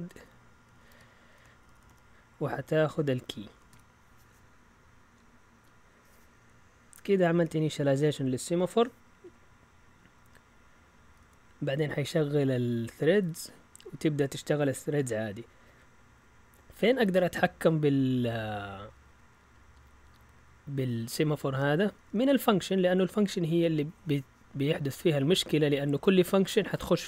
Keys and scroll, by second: 0.1-4.2 typing, 7.1 Right, 7.4 Right, 10.0 Down, 11.0-13.8 typing, 17.7 Down, 18.0-20.9 typing.